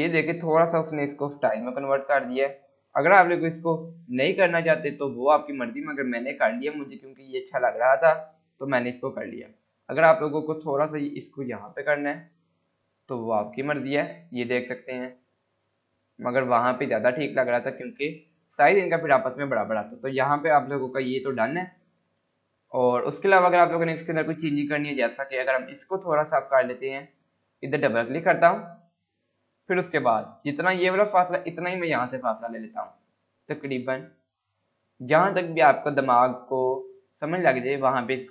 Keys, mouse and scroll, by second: 3.6 click, 6.2 scroll down 1, 7.5-8.5 scroll up 1, 8.5 click, 10.0 scroll up 1, 11.4-12.9 click, 14.0 scroll down 1, 15.2 click, 15.5 scroll up 1, 16.4-17.4 click, 17.9 scroll down 1, 21.4 click, 23.3 scroll down 1, 23.6 scroll up 1, 28.4 click, 28.7 scroll down 1, 29.6 scroll up 1.